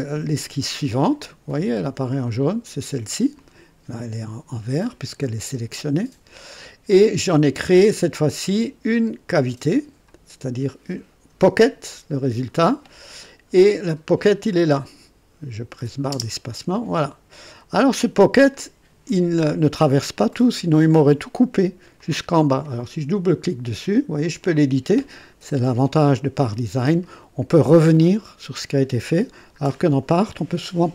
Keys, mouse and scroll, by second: 2.2 click, 3.4 click, 13.5 click, 16.1 space, 17.3 click, 18.5 click, 20.3 click, 22.0-22.8 drag, 24.2 click, 27.0-29.1 right drag, 28.0 click, 29.6 scroll up 1, 30.1 right click.